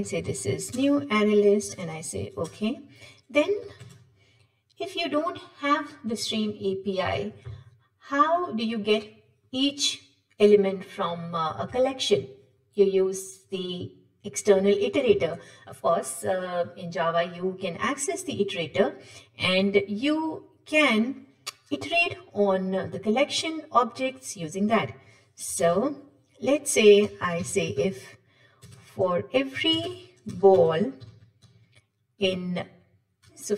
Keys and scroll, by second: 1.0 Return, 1.7 ctrl+shift+super+Return, 25.6 ctrl+shift+super+Return.